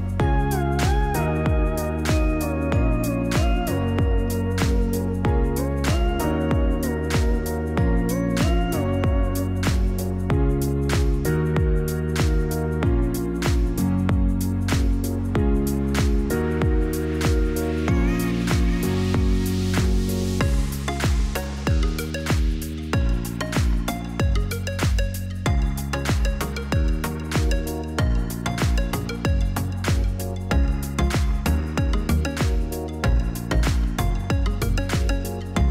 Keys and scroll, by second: 0.9 0, 8.0 ctrl+d, 10.1 Return, 10.8 BackSpace, 11.2 l, 11.9 Return, 14.9-16.0 typing, 28.3 0.